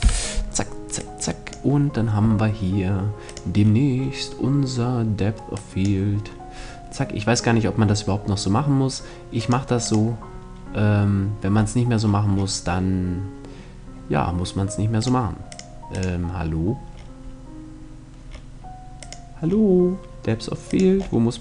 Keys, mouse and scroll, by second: 0.5-2.3 drag, 2.9-4.8 drag, 4.3-5.7 middle drag, 5.0-6.9 drag, 6.7-11.1 middle drag, 8.9-10.8 drag, 10.8 right click, 11.0 click, 14.5-17.2 drag, 18.5-21.4 drag.